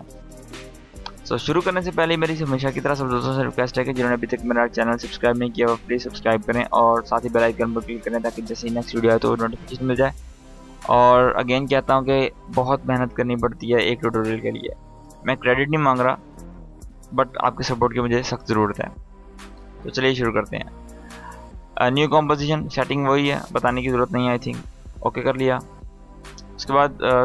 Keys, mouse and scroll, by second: 19.9 click, 23.7 click, 25.8 scroll down 1, 26.5 right click, 27.1 click.